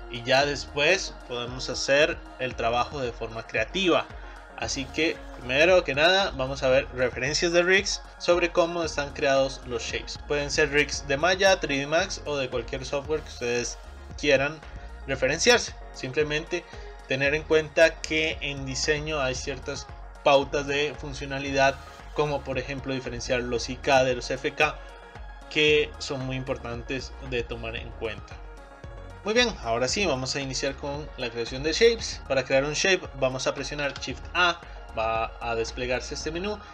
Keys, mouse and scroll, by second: 5.7 click, 8.1-8.5 scroll down 5, 9.4 scroll up 4, 28.9 scroll up 3, 29.4-31.3 middle drag, 31.3-31.8 scroll up 1, 31.8 shift+middle click, 32.2 click, 33.9 shift+a.